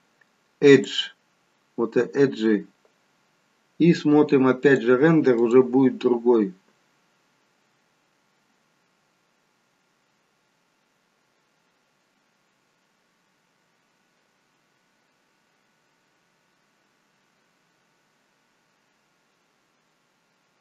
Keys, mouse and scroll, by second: 0.8 click, 4.7 click.